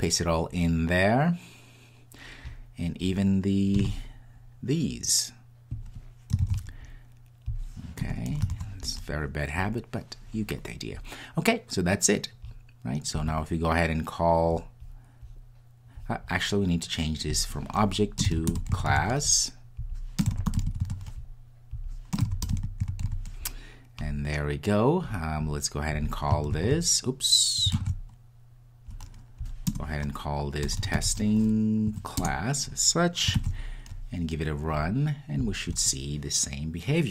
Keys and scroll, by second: 3.1 super+v, 6.4 super+c, 8.6 super+v, 26.5 super+v, 27.8 super+z, 32.2 Return, 34.7 super+s, 35.4 ctrl+r.